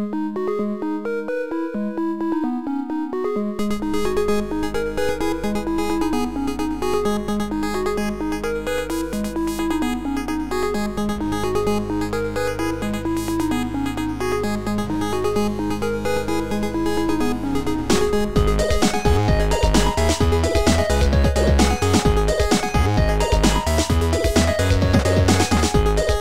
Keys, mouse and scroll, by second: 0.4 shift+click, 2.1 Delete, 2.1 click, 4.9 shift+Delete, 4.9 click, 6.3 Delete, 9.7 click, 13.3 click, 14.2 shift+click, 15.4 shift+click, 16.4 shift+click, 17.2 Delete, 18.5 shift+click, 19.7 Delete, 21.2 Delete, 21.2 right click, 21.2 click, 23.4 Delete, 23.4 click, 23.4 right click, 24.7 right click, 25.8 click.